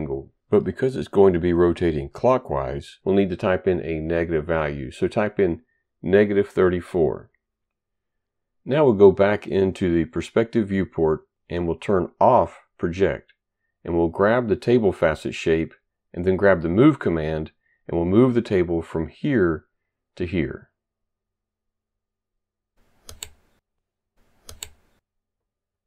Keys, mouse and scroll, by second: 4.2 click, 5.5-6.5 typing, 9.5 click, 9.6 double click, 10.4 click, 12.4 click, 14.0 click, 15.9 click, 19.0 click, 21.3 ctrl+right click, 23.3 click, 24.0 right click.